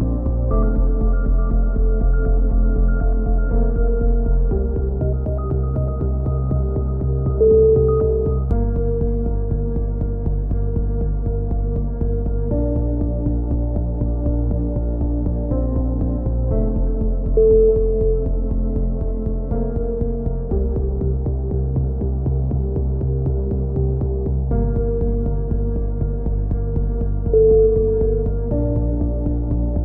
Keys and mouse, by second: 10.5 middle click, 10.9 click, 16.1-17.3 right drag, 20.5-23.6 middle drag, 23.2 a, 23.6-24.8 drag, 24.8 middle click, 25.0 click, 26.1-27.5 right drag, 27.2 click, 29.2-29.8 drag.